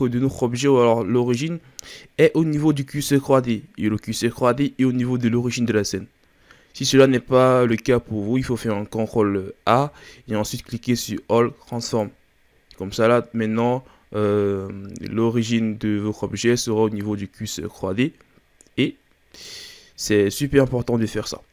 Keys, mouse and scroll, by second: 0.1-3.1 scroll up 1, 7.2-9.0 scroll down 4, 9.7 ctrl+a, 13.7 scroll down 1, 13.9-16.9 scroll up 3, 19.8-21.2 scroll down 3, 21.2-21.5 scroll up 2.